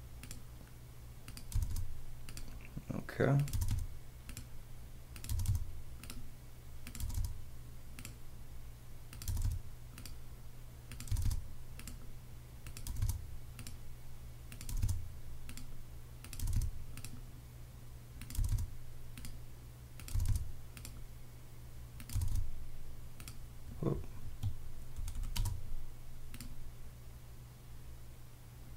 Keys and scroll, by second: 0.6 space, 1.5 space, 2.3 space, 3.5 space, 4.6-7.0 typing, 8.1 space, 9.2 space, 10.3 space, 11.1 space, 12.8 space, 13.6 space, 14.7 space, 15.5 space, 16.4 space, 17.5 space, 18.3 space, 19.2 space, 20.1 space, 25.4 space, 26.2 space.